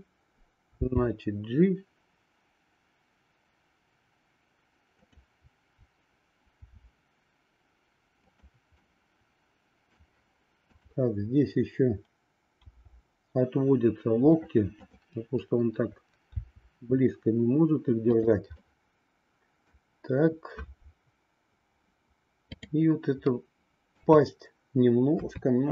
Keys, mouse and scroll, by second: 0.7 g, 6.6 r, 8.8-9.9 middle drag, 10.6-12.1 drag, 12.6 r, 16.2 r, 18.7-19.8 middle drag, 22.4-24.0 drag, 24.0 middle click, 25.2 KP_3.